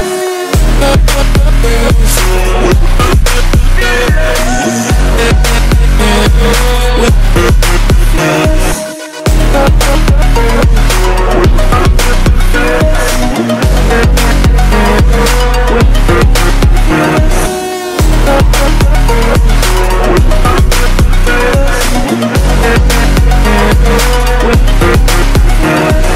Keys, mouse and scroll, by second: 0.7-1.1 scroll down 1, 1.1-2.1 scroll up 1, 2.1 click, 2.6 scroll down 1, 2.8 scroll up 1, 3.7 click, 4.6-5.0 scroll down 1, 5.0-5.5 scroll up 1, 5.5-6.9 drag, 6.9-7.3 scroll down 1, 7.6-8.2 scroll up 1, 8.2 click, 8.8-9.3 scroll down 1, 9.3-10.0 scroll up 1, 10.0 click, 11.2-11.7 scroll down 1, 11.7 scroll up 1, 13.0 click, 13.6-13.9 scroll down 1, 13.9 scroll up 1, 14.7-17.1 drag, 17.1-17.4 scroll down 1, 17.4-17.9 scroll up 1, 17.9 click, 18.5 scroll down 1, 18.8-19.2 scroll up 1, 19.4 click, 19.6 scroll down 1, 19.9-20.3 scroll up 1, 20.7-22.2 drag, 22.7-23.1 scroll down 1, 23.1-23.9 scroll up 1, 23.9 click, 24.1 scroll down 1, 24.4-25.2 scroll up 2, 25.2-26.1 drag.